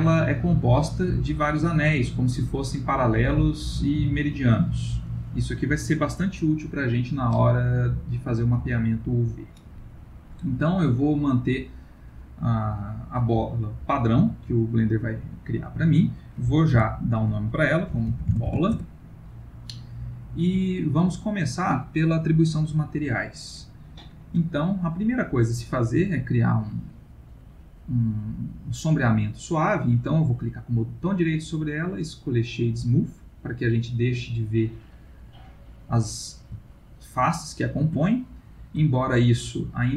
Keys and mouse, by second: 1.0 middle click, 2.5 middle click, 10.5 middle click, 12.5 middle click, 16.7 F2, 20.3 middle click, 25.8 right click, 33.7 middle click, 34.7 middle click, 35.1 middle click, 36.6 ctrl+middle click, 38.0 ctrl+middle click.